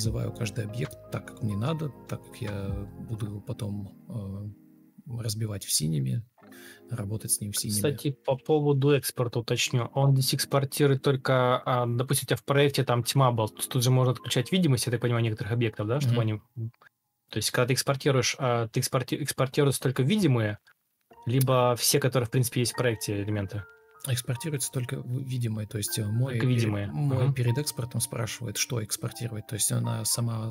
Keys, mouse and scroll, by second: 0.7 ctrl+click, 2.4 ctrl+alt+shift+o, 4.2 ctrl+d, 5.4 ctrl+space, 8.3 ctrl+d, 13.1 Escape, 13.5 ctrl+f, 20.9 ctrl+u, 21.8-23.7 typing, 24.7 Escape, 25.0 Delete, 26.6 Escape, 27.0 ctrl+click, 27.4 ctrl+space, 28.3 ctrl+space, 28.9 ctrl+click, 29.9 Escape, 30.1 Escape.